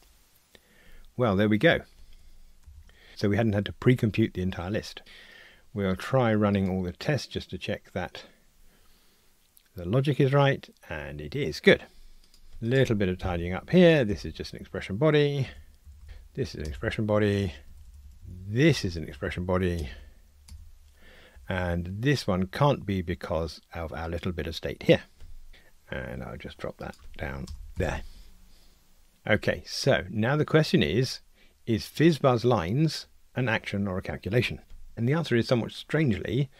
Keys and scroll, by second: 13.2 alt+Return, 15.6 Delete, 16.0 alt+Return, 19.8 alt+Return, 25.5 ctrl+r, 27.8 alt+super+l, 28.2 ctrl+r.